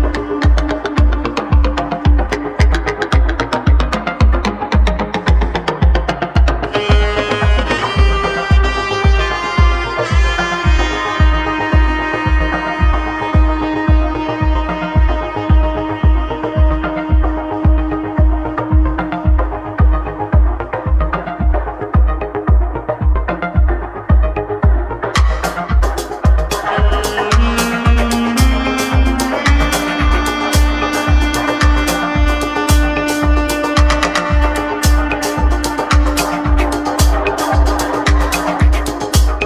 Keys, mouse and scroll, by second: 2.7-5.2 middle drag, 6.6 middle click, 7.4-8.8 shift+drag, 8.8-10.2 middle drag, 10.2 shift+click, 10.7 middle click, 11.3 shift+a, 13.0 ctrl+e, 14.7 ctrl+e, 15.3-17.8 middle drag, 18.5-19.5 scroll down 1, 19.5 ctrl+z, 20.2 ctrl+z, 21.0-22.3 middle drag, 22.3 ctrl+z, 22.7 ctrl+z, 24.8 s, 32.1 ctrl+r, 33.9 ctrl+r.